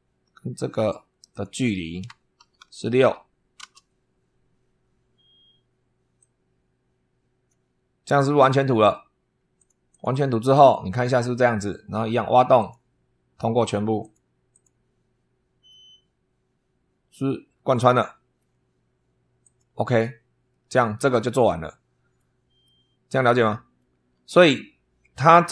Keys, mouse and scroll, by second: 1.2 click, 2.3 shift+h, 2.9 6, 3.5 Return, 6.0-7.5 drag, 9.4 click, 10.0 click, 12.4 click, 13.9 click, 14.4 click, 15.6-18.4 middle drag, 19.3 click, 20.4-22.2 drag, 22.5-23.8 drag.